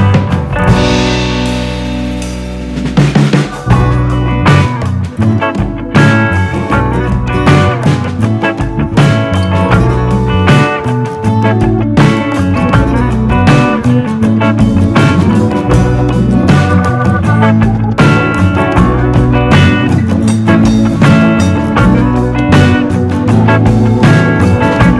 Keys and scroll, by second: 10.2 super+z, 10.6 super+z, 10.7 super+z.